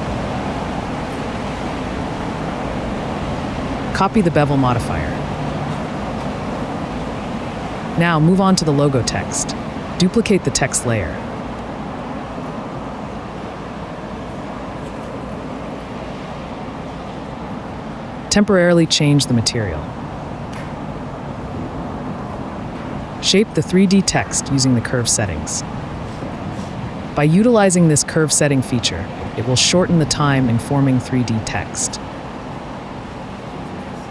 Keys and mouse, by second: 0.4 click, 1.0 click, 1.2 click, 2.0 middle click, 3.5 click, 4.4-5.0 middle drag, 5.7 click, 8.8 /, 9.0 z, 10.3 shift+d, 10.7-12.1 drag, 13.4 click, 15.2-15.8 middle drag, 15.9 shift+click, 16.5 /, 17.9 z, 20.9 click, 26.1 click, 29.4 shift+click, 29.9 shift+right click, 30.6-31.6 right drag, 32.9 right click, 33.7 right click.